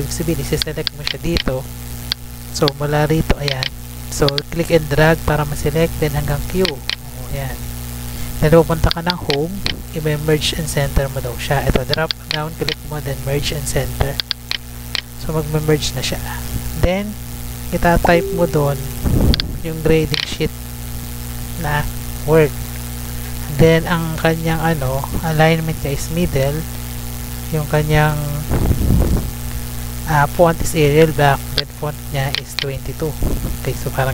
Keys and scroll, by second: 16.5 Tab, 20.4 ctrl+c.